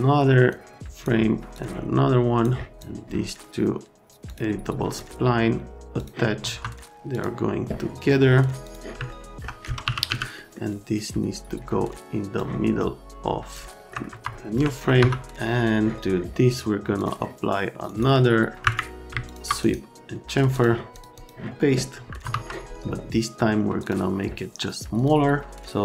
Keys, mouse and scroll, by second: 0.5 click, 1.5 click, 2.7 click, 4.3 click, 6.0 click, 6.4 F3, 7.1 click, 8.7 click, 9.1 alt+middle click, 9.6-10.6 typing, 10.3 middle click, 12.4 middle click, 13.8 alt+scroll, 14.1 F3, 14.3-14.8 scroll, 15.0 F3, 16.9 click, 18.6 Escape, 19.2 ctrl+click, 20.5 click, 20.9 click, 21.1 click, 22.2 F3.